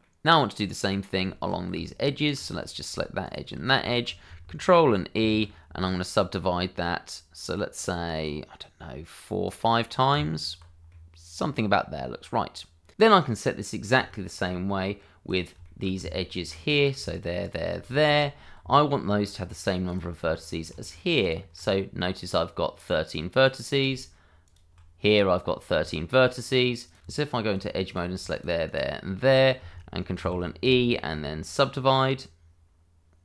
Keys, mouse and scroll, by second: 1.3 shift+middle click, 1.7 Tab, 2.6 click, 3.2 shift+click, 3.8 shift+middle click, 5.1 ctrl+e, 6.0 click, 7.8 double click, 9.4 click, 10.1 Tab, 10.9 middle click, 13.2 middle click, 14.6 shift+middle click, 15.2 middle click, 15.2 click, 15.6 shift+middle click, 16.0 Tab, 16.7 click, 17.1 shift+click, 17.4 shift+double click, 17.9 shift+middle click, 18.6 Tab, 19.8 click, 20.3 shift+middle click, 21.2 ctrl+click, 23.4 click, 24.4 ctrl+click, 25.9 shift+middle click, 26.8 click, 27.0 Tab, 27.8 click, 28.3 shift+click, 28.6 shift+double click, 30.2 ctrl+e.